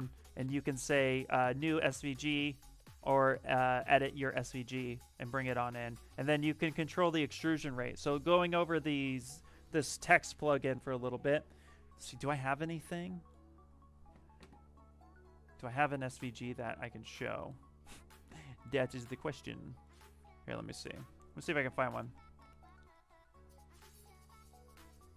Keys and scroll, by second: 21.7-22.5 typing, 24.9-25.1 typing.